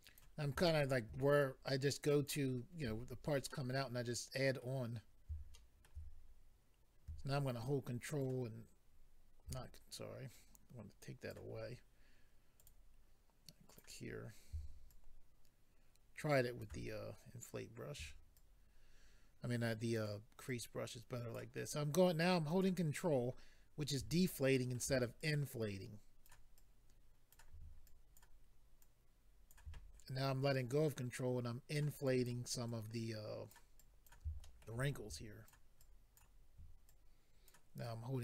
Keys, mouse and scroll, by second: 0.6 middle click, 1.4 ctrl+click, 3.1-3.5 scroll down 2, 3.5 middle click, 4.9-5.5 scroll up 2, 5.5 shift+middle click, 6.1-7.1 scroll up 3, 7.6 ctrl+click, 10.3 click, 11.5-12.5 scroll down 2, 12.6 click, 12.7 click, 13.7 click, 13.8 click, 14.0-14.9 scroll up 2, 14.9 shift+click, 18.3 ctrl+click, 20.4 ctrl+click, 21.6 ctrl+click, 24.1-24.5 scroll down 2, 24.5 middle click, 25.2 ctrl+click, 26.5 ctrl+click, 27.8 ctrl+click, 28.8 ctrl+click, 30.5 click, 32.0 click, 32.7 click, 33.8 click, 34.4 shift+middle click, 35.1 click, 35.8 click, 36.9 ctrl+click, 37.5 click, 37.8 ctrl+click.